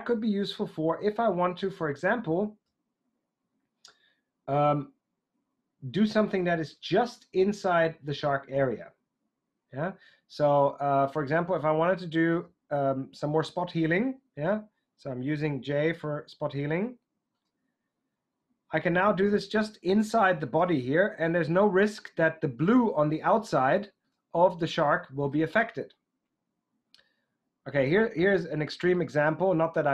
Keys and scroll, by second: 15.7 j.